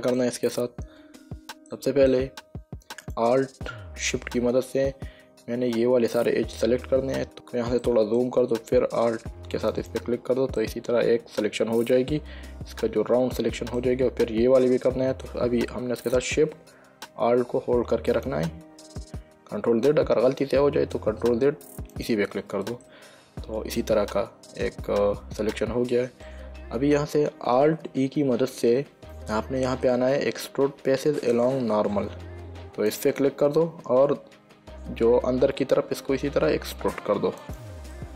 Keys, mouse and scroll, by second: 2.0 shift+middle click, 3.3 click, 7.3 middle click, 8.1 middle click, 10.0 alt+click, 10.9 middle click, 18.4 alt+shift+click, 19.9 ctrl+z, 22.3 alt+shift+click, 23.2 middle click, 33.2 click, 37.7 click.